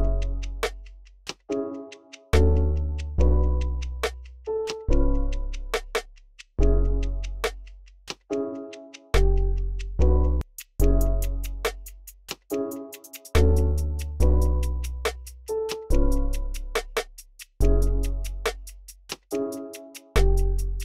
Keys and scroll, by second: 2.8 super+w, 3.2 v, 5.6-9.1 typing, 12.0 v, 12.3 e, 12.7 super+a, 12.9 alt+Page_Down, 13.6 alt+Page_Down, 13.9 x, 14.5 x, 15.0 alt+super+s, 19.7 super+w, 20.6 super+w.